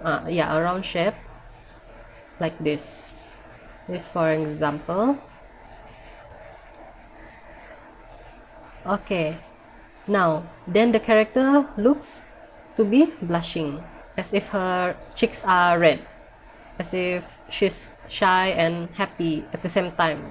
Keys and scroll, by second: 4.7 ctrl+z.